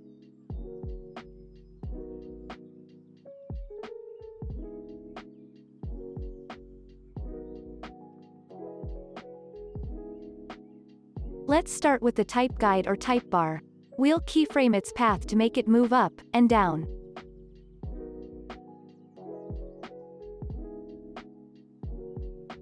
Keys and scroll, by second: 10.9 ctrl+s, 13.0 space, 18.4 u.